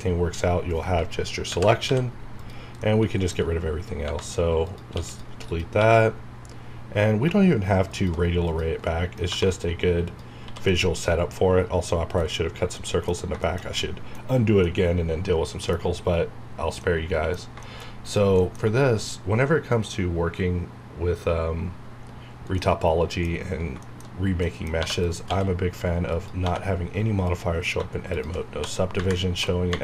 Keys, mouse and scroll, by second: 1.4 ctrl+i, 1.9 x, 2.4 click, 2.8 middle click, 4.6 click, 4.9 x, 5.1 click, 5.8 q, 7.9 shift+click, 8.9 middle click, 9.3 1, 10.0 click, 10.4 h, 10.7-13.1 middle drag, 13.1 scroll up 1, 13.4-15.9 shift+middle drag, 15.9 scroll up 1, 16.8 middle click, 18.0 click, 18.4 middle click, 22.6 middle click, 23.3-23.7 scroll up 1, 23.8 shift+middle click, 24.0 shift+scroll up 1, 24.4 middle click, 24.8 3, 25.0 click, 25.2 x, 26.1 click, 26.4 2, 27.3 click, 28.5-29.8 typing.